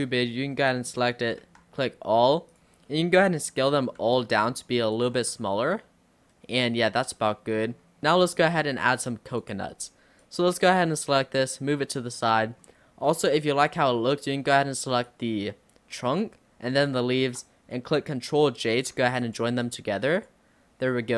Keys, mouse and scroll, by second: 1.5 a, 2.6 click, 2.9 middle click, 3.2 scroll down 2, 3.5 middle click, 4.1 s, 5.2 Tab, 5.4-7.1 middle drag, 7.1 scroll up 1, 7.2-9.4 middle drag, 9.4 click, 9.8-10.2 scroll down 3, 10.2 click, 11.4 click, 12.3 click, 12.6-13.0 scroll up 4, 13.5-15.1 shift+middle drag, 15.1 click, 16.9 shift+click, 18.8 ctrl+j, 19.3 click, 19.7 click, 20.2 click.